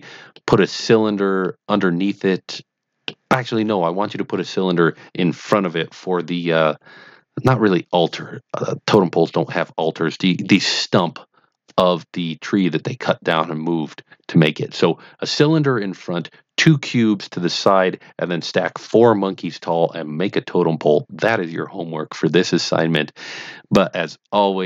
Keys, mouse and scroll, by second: 0.3-0.7 middle drag, 1.4-1.7 middle drag, 2.5 middle click, 3.4-5.2 middle drag.